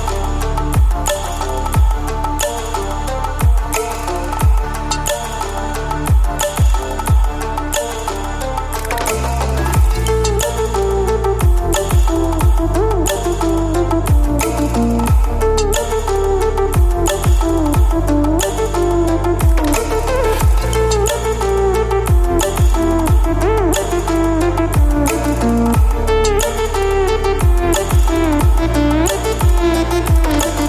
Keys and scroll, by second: 0.8 ctrl+space, 1.0 ctrl+space, 2.3 ctrl+space, 3.5 ctrl+space, 4.9 space, 5.8 space, 9.0 space, 12.4 ctrl+space, 12.9 ctrl+space, 14.7 ctrl+space, 19.3 ctrl+space, 20.3 space, 21.9 space, 25.4 ctrl+space, 25.9 ctrl+space, 27.5 ctrl+space, 28.0 ctrl+space.